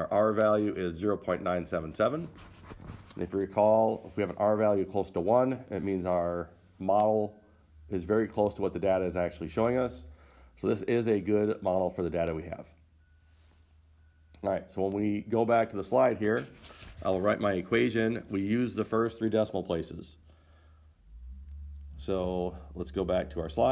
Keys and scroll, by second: 23.6 Return.